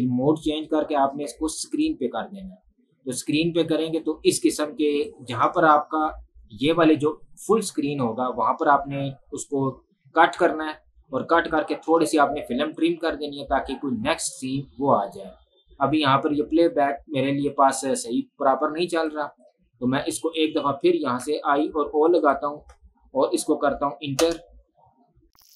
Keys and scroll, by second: 6.8 space, 24.6 Return.